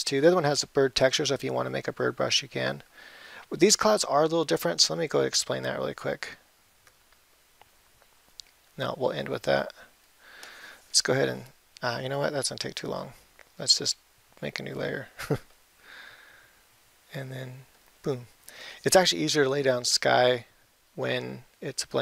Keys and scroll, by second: 21.5 ].